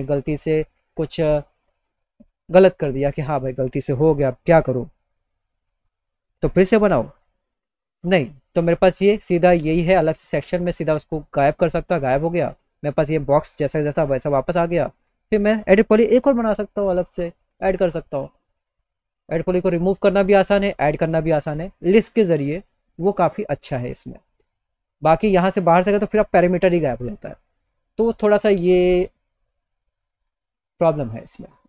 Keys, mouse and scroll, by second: 0.2 middle click, 0.9 click, 1.1-1.6 scroll down 1, 2.3 click, 2.8 middle click, 2.8 click, 7.7 click, 9.4 click, 9.9-10.3 scroll down 2, 10.7 click, 14.4 click, 18.7 click, 23.9 click, 24.5 click.